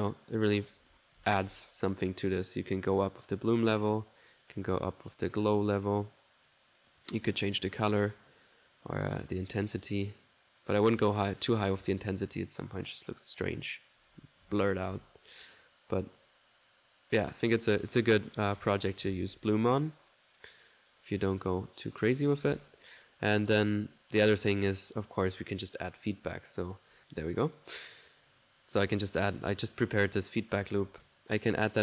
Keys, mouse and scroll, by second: 2.0-3.1 ctrl+drag, 3.3-4.6 drag, 4.9-6.8 drag, 7.0 click, 9.3-14.1 drag, 16.2-17.4 ctrl+drag, 19.1 ctrl+z, 20.6 click, 21.6 click, 22.8 click, 23.5 click, 23.9 click, 25.5 click, 26.1 middle click, 27.6 click, 28.4 click, 29.2 click, 30.3 right click, 31.0-31.8 drag.